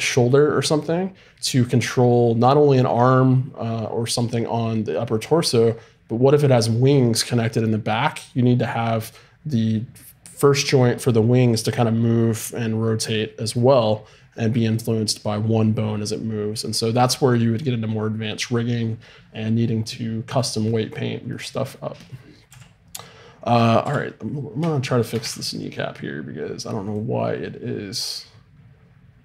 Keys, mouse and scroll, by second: 22.5 KP_3, 23.8 KP_5, 25.3 r.